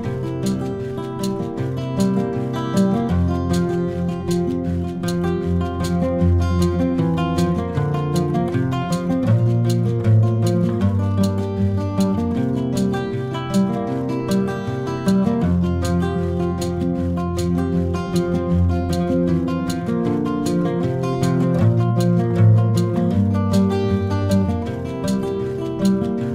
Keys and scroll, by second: 4.8 v, 6.9 super+c, 7.1 super+v, 10.0 Return, 19.4 shift+super+[, 22.5 v.